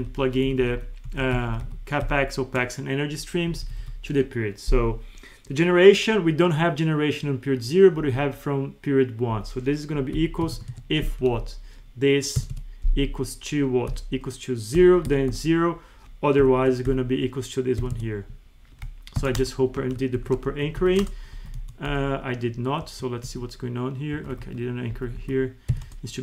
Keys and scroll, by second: 0.5 Right, 1.1 Up, 1.3 ctrl+shift+Down, 3.5 Right, 8.0 Right, 9.3 Left, 10.7 Tab, 11.3 Up, 12.4 F4, 16.9 ctrl+Left, 17.8 F4, 19.8 Up, 20.2 ctrl+c, 20.5 ctrl+shift+Right, 21.3 Left, 21.6 Right, 22.3 F3, 22.8 Escape, 23.3 F2, 24.2 Escape, 24.3 Left, 24.4 F2, 24.9 Left, 25.7 F4.